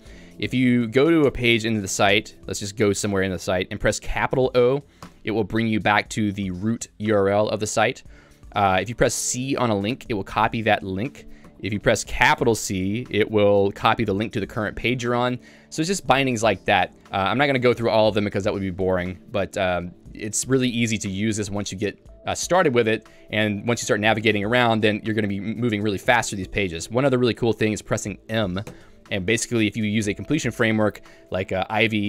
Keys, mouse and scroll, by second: 1.2 Return, 2.2 Return, 5.3 shift+o, 8.1 k, 8.7 j, 9.9 c, 11.5 k.